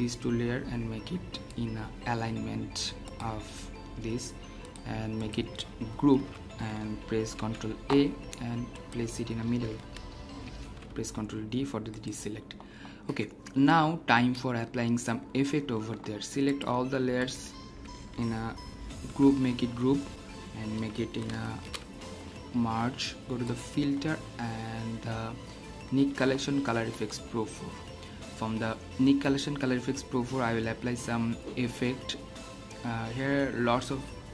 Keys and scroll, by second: 6.1 ctrl+g, 7.3 ctrl+a, 10.6 ctrl+d, 19.0 ctrl+g, 21.4 ctrl+alt+shift+e.